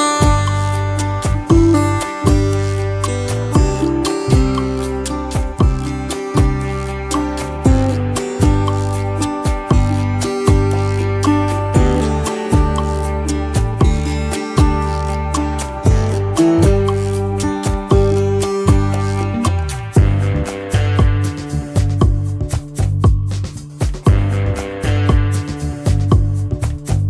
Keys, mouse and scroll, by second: 5.7 BackSpace, 10.7 y, 12.7 ctrl+v, 13.6 Home, 13.9 c.